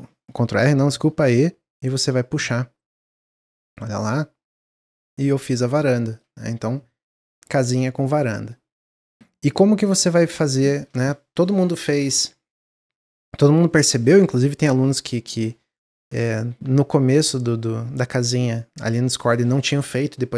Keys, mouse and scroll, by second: 1.1 e, 6.3-9.4 middle drag, 9.4 click, 10.0 shift+click, 10.2 shift+click, 10.5-12.5 shift+drag.